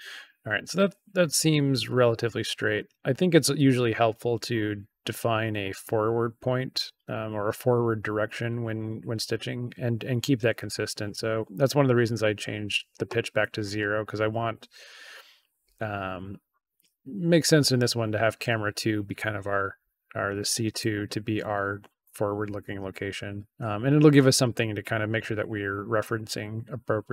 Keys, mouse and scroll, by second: 20.6 click.